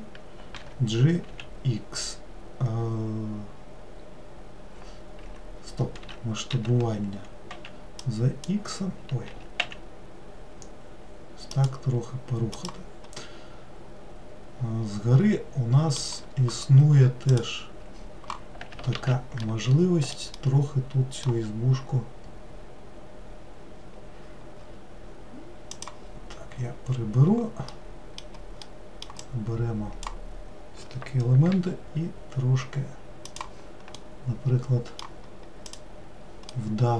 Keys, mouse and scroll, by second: 0.7 g, 6.6 s, 9.4 s, 12.6 click, 13.2-16.4 middle drag, 17.4 click, 19.0 alt+z, 19.5 alt+middle click, 20.5-23.6 middle drag, 25.8-27.8 drag, 27.8-29.3 middle drag, 29.3 click, 31.6 g, 34.0-35.8 middle drag, 35.8 click, 36.6-36.9 middle drag.